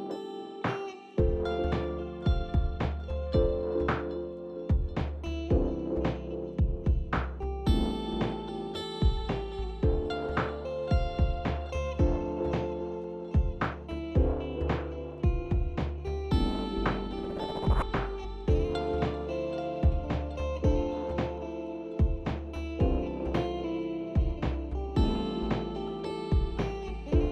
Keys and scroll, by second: 17.4 w, 22.9 ctrl+z, 26.3 w, 27.0 w, 27.1 w.